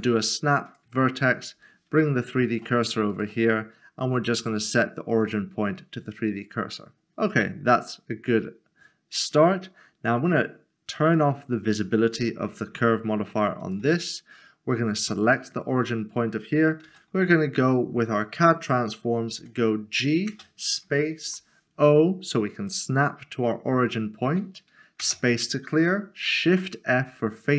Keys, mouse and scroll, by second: 1.6 shift+r, 1.7 shift+right click, 3.1 right click, 5.2 click, 11.2 click, 12.7 s, 12.8 shift+middle click, 13.6 shift+middle click, 16.6 click, 16.8 alt+c, 19.4 typing, 21.2 typing, 22.5 click, 25.0 click, 26.5 typing.